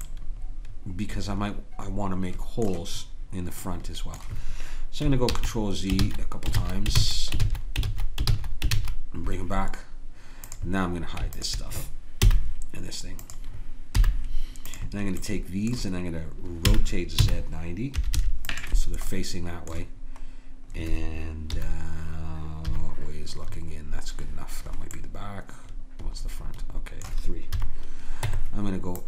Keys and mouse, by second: 3.6 click, 5.3 ctrl+z, 6.0 ctrl+z, 6.6 ctrl+z, 7.0 ctrl+z, 7.4 ctrl+z, 7.9 ctrl+z, 8.3 ctrl+z, 8.8 ctrl+z, 10.5 click, 12.3 h, 14.0 h, 15.2-16.6 drag, 16.7 r, 19.1-20.2 drag, 21.5 KP_1, 22.6 KP_3, 27.5 KP_3, 28.3 Tab.